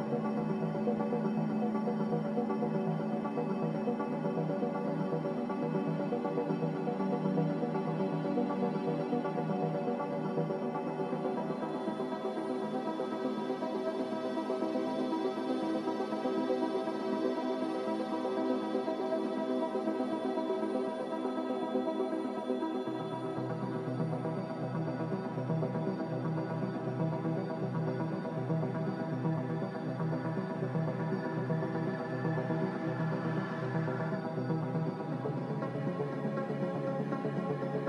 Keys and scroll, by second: 31.6 a.